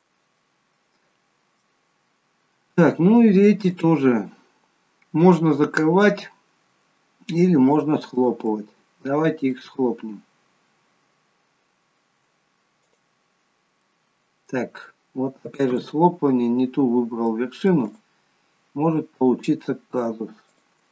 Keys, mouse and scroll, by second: 0.5-0.8 scroll down 3, 0.8 middle click, 2.0-3.8 scroll up 5, 2.9 middle click, 3.8 click, 8.3 shift+click, 9.6 right click, 13.9 middle click, 15.8 ctrl+z, 17.5 middle click, 17.5-17.9 scroll up 2, 17.9 click, 19.3 click, 20.7 shift+click.